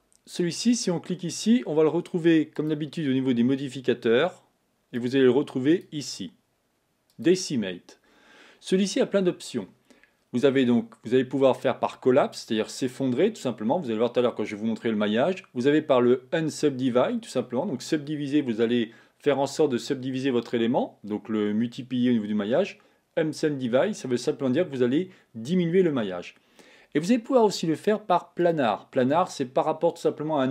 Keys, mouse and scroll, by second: 1.3 click, 2.8 click, 4.5-9.1 drag, 28.9 click.